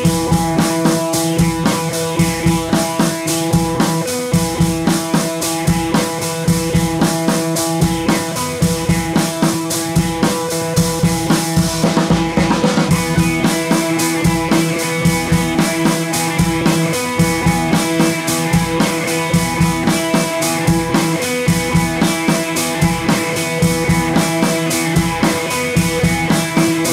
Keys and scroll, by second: 9.5 super+z, 21.7 BackSpace.